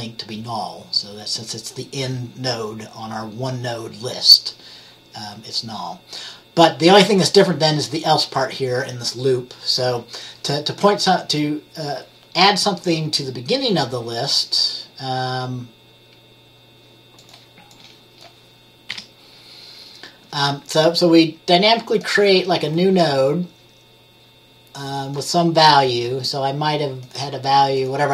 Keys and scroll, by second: 19.0 Delete.